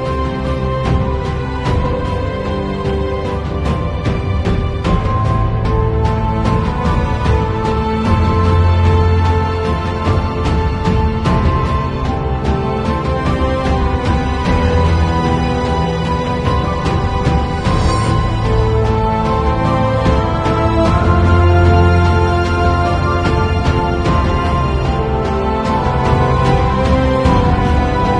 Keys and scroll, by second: 5.4 ], 6.2 [, 7.9 ], 9.4 [, 10.9 ], 12.6 v, 25.7 b, 26.6 [.